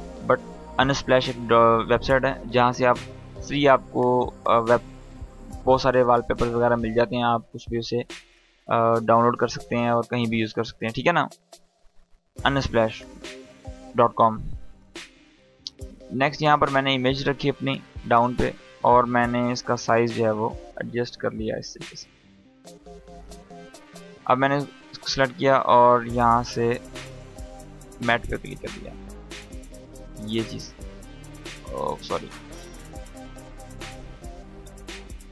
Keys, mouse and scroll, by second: 6.0-6.7 scroll down 1, 8.4-8.8 scroll up 1, 10.9 click, 11.6-16.0 ctrl+drag, 17.6 scroll down 1, 18.9 s, 19.8-22.3 drag, 22.4 scroll up 1, 23.9 click, 26.3-31.4 drag, 32.1 space, 32.6 scroll down 1, 33.3 space, 33.8-34.4 drag.